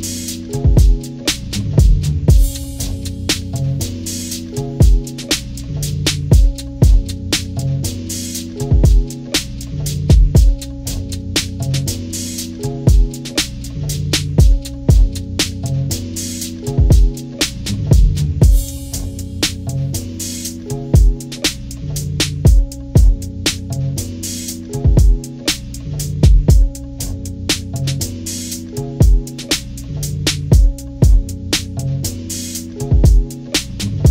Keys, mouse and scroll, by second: 0.5 click, 2.8 click, 3.4 click, 3.9 click, 4.1 click, 4.4 click, 4.7 click, 5.8 click, 6.8 click, 7.4 click, 7.8 click, 8.0 click, 8.3 click, 8.7 click, 9.5 click, 10.1 click, 10.2 click, 10.9 click, 11.4 click, 13.6-14.9 drag, 15.1 click, 15.5 click, 15.9 click, 16.5 click, 16.8 click, 17.3 click, 17.5 click, 17.7 click, 18.4 click, 18.6 click, 18.8 click, 19.1 click, 19.6 click, 20.1 click, 20.9 click, 21.4 click, 21.9 click, 22.2 click, 22.8 click, 23.1 click, 23.4 click, 23.9 click, 24.1 click, 24.5 click, 25.6-27.1 drag, 27.3-28.6 drag.